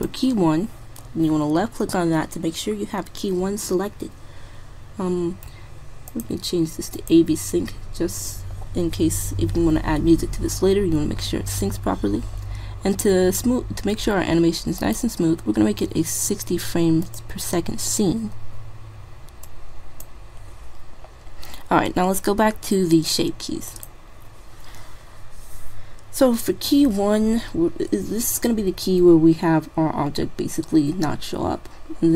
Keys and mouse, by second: 1.7 typing, 6.1-7.9 drag, 11.6-14.4 middle drag, 14.8-16.6 drag, 17.2-18.8 drag, 21.6-23.5 middle drag, 23.7-25.5 drag.